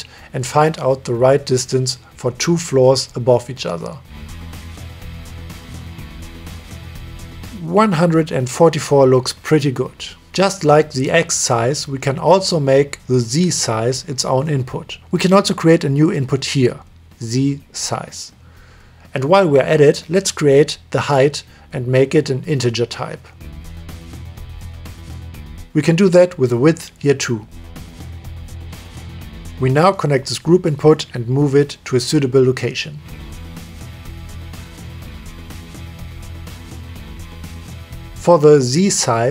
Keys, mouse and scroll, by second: 0.3 middle click, 0.5-0.8 middle drag, 1.9 KP_3, 4.3-8.5 shift+drag, 9.3-10.2 middle drag, 10.3-12.3 middle drag, 12.8 click, 15.5-16.0 drag, 16.4-18.4 drag, 18.6-19.8 drag, 20.2-22.2 drag, 24.0-25.2 drag, 27.4 click, 27.8-28.3 drag, 31.1 click, 31.7 middle click, 33.2-33.8 drag, 34.4-34.9 drag, 36.0 click, 37.1 click.